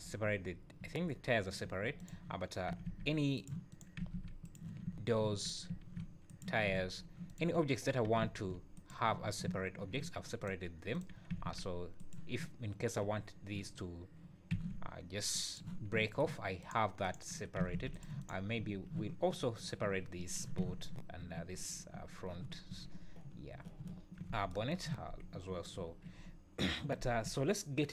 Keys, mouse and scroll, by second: 0.3 `, 1.0 `, 1.7 `, 2.0 click, 2.7 r, 3.7 click, 4.0 r, 4.9 `, 5.4 click, 5.7 r, 6.7 `, 7.3 click, 8.2 r, 9.5 `, 10.4 click, 10.9 click, 11.3 r, 14.5 g, 15.9 `, 16.6 click, 17.0 click, 17.6 r, 18.2 click, 18.6 `, 20.6 `, 22.7 `, 23.9 `, 25.0 scroll up 3, 25.5-26.6 scroll down 7, 25.8 `, 27.0 scroll up 1.